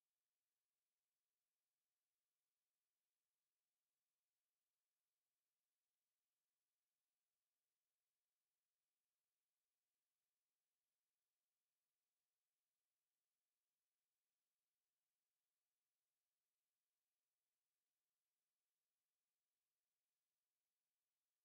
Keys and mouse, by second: 0.3 shift+right click, 1.1 alt+click, 1.5 alt+right click, 1.9 alt+click, 2.8 ctrl+click, 3.9 click, 6.0 alt+click, 7.2 alt+middle click, 7.6 alt+click, 8.7 alt+click, 9.6 alt+right click, 10.2 e, 10.7 w, 11.6 click, 12.5 alt+click, 15.1 alt+middle click, 15.8 alt+click, 16.6 alt+right click, 16.9 alt+click, 17.8 alt+right click, 18.4 alt+click, 19.8 click.